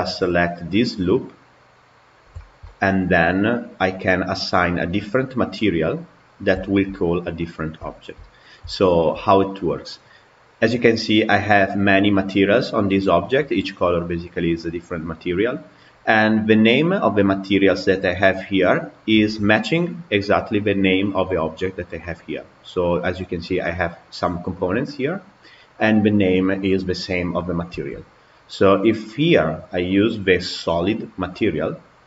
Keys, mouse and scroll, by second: 0.1-3.7 middle drag, 3.7 click, 6.5-8.4 shift+middle drag, 8.4 scroll down 2, 8.6-12.2 shift+middle drag, 19.4 Tab, 20.1 click, 26.4 click, 27.9 Tab, 30.5 click.